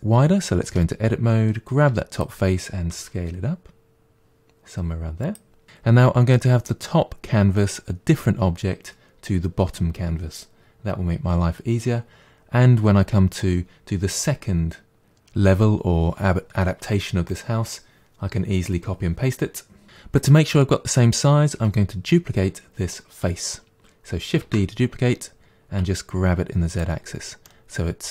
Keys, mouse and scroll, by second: 0.7 Tab, 1.9 3, 2.2 click, 3.0 s, 24.5 shift+d, 27.5-28.1 middle drag.